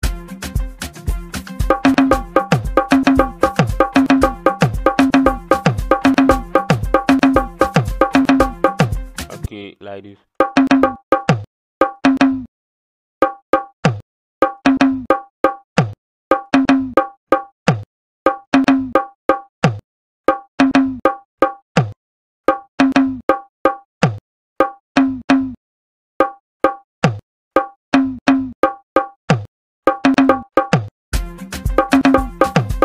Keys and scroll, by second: 1.7 KP_4, 1.9 KP_6, 2.1 KP_4, 3.5 KP_2, 4.9 KP_6, 5.5 KP_4, 6.0 KP_6, 7.2 KP_6, 7.6 KP_4, 7.8 KP_2, 8.8 KP_2, 10.4 KP_4, 11.4 KP_2, 11.8 KP_4, 12.0 KP_6, 13.2-20.3 typing, 21.8-30.7 typing.